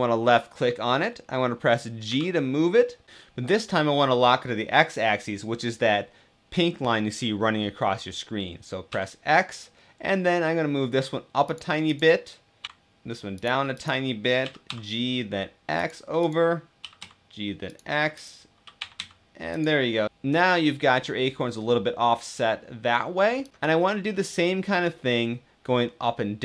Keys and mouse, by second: 1.7 g, 8.6 x, 11.1 click, 11.6 click, 12.3 g, 12.7 x, 12.7 c, 13.1 click, 16.7 g, 16.7 x, 17.4 click, 18.9 g, 18.9 x, 19.3 click, 19.6-20.6 middle drag, 20.9-23.1 middle drag, 23.5 g, 23.5 x, 23.8 middle click, 25.4-26.4 middle drag.